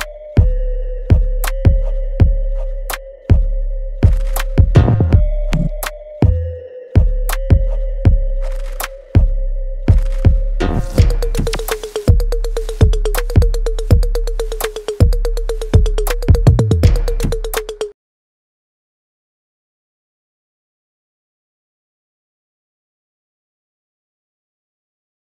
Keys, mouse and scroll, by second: 0.6 click, 0.9 e, 1.6 click, 2.3 w, 4.0 click, 4.0-5.9 drag, 6.2 alt+right click, 6.7 alt+click, 7.1 alt+middle click, 7.6 alt+click, 8.3 alt+right click, 8.9 alt+middle click, 10.1 alt+right click, 12.2 click, 14.1-18.0 alt+right drag, 18.2 click.